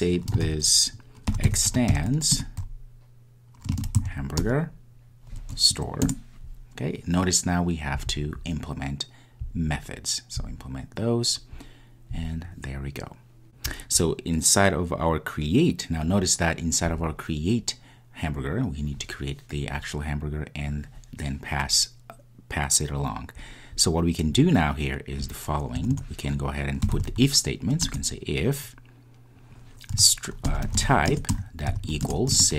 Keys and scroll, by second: 2.5 Return, 28.1 Return, 31.3 Return.